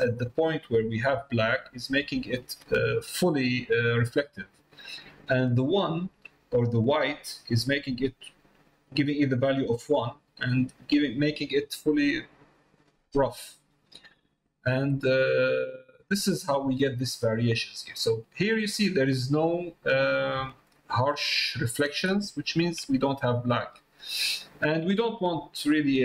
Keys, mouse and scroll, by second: 1.5 middle click, 2.0 shift+middle click, 3.3 middle click, 10.3 middle click, 15.0 middle click, 18.4 middle click, 19.7 middle click, 20.6-21.9 ctrl+middle drag, 24.6 middle click, 25.5 middle click.